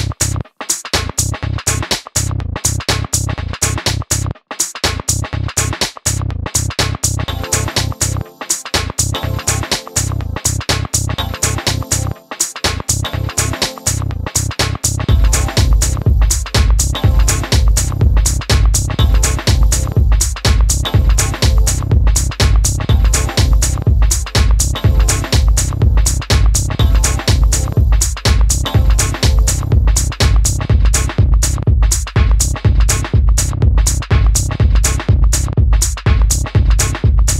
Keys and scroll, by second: 5.9-7.1 typing, 11.7 typing, 16.0 super+c, 21.3-22.0 typing, 23.8 Return, 24.9-25.7 typing, 35.2 d.